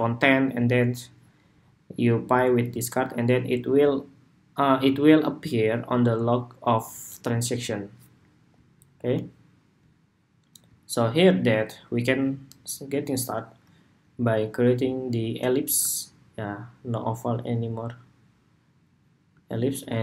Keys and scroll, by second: 19.7 super+g.